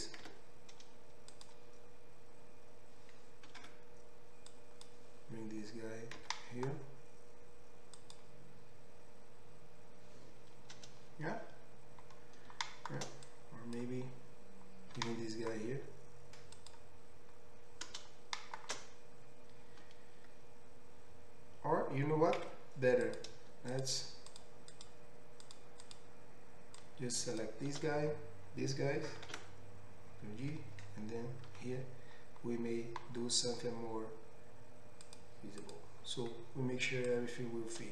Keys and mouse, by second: 0.2 x, 4.0 1, 6.2 g, 8.1-13.4 middle drag, 13.4-16.7 drag, 14.9 g, 16.7 middle click, 22.7 2, 23.1 click, 24.3 shift+click, 25.4 shift+click, 25.5 shift+middle click, 25.9 shift+click, 25.9 shift+middle click, 26.8-35.9 shift+drag, 29.3 ctrl+x, 31.4 ctrl+r, 35.9-37.1 middle drag, 37.1-37.9 drag.